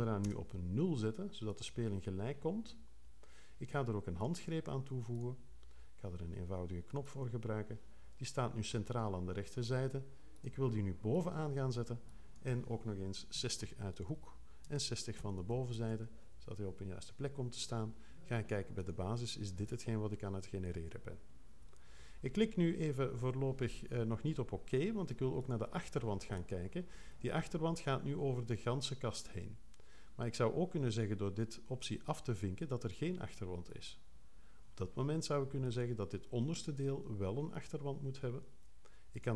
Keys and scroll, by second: 0.2 0, 13.3 6, 14.6 Tab, 15.2 6, 15.7 Tab.